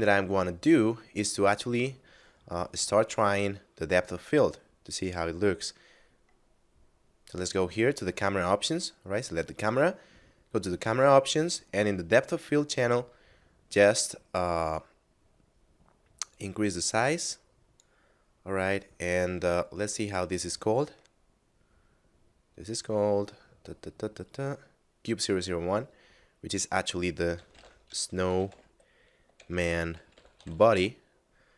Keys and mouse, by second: 3.1 right click, 6.6 middle click, 10.5 click, 16.3 click, 19.9 right click, 21.3 middle click, 26.5 click, 27.1-28.5 typing, 30.0 b, 30.5 y, 30.7 Return.